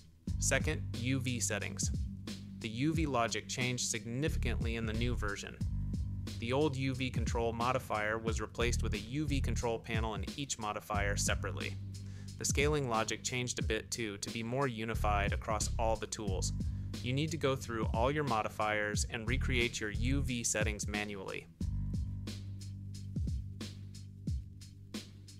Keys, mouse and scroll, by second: 1.6-2.1 drag, 14.2 click, 14.9-16.0 drag, 16.2 click, 19.1 click, 19.5 click, 24.8 click.